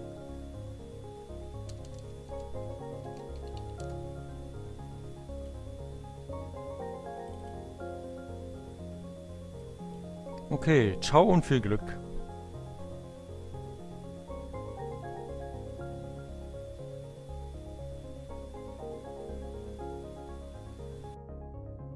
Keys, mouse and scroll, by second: 0.5-3.3 typing, 4.9 click, 6.7 click, 9.5 click.